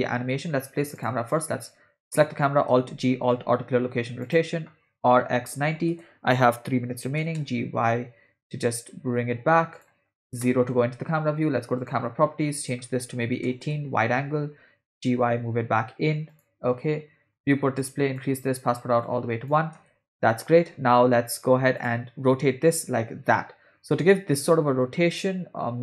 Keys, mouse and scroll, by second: 1.0 click, 2.7 alt+g, 3.3 alt+r, 4.2 click, 5.1 r, 7.2 g, 10.4 KP_0, 11.8 click, 12.6-13.7 drag, 14.9 g, 17.3 click, 17.8 click, 19.0 click, 19.7 space, 21.8 drag, 22.8 r.